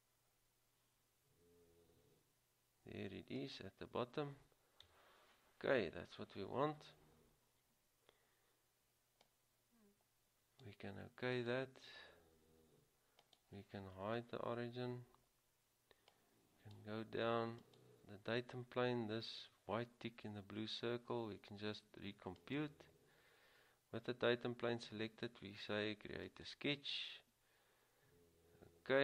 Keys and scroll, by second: 5.0 Return.